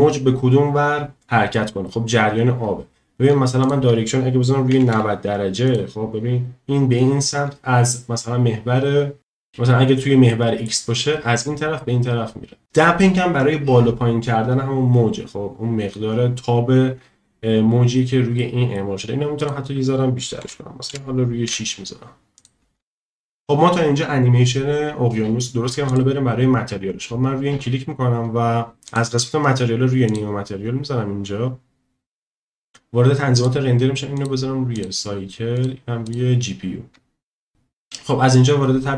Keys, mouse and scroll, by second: 3.6-5.7 drag, 10.3-10.7 middle drag, 18.4 middle click, 19.4-22.4 drag, 25.9 click, 28.9 click, 30.1-32.1 drag, 33.4 click, 34.1-34.9 drag, 35.6-36.2 drag.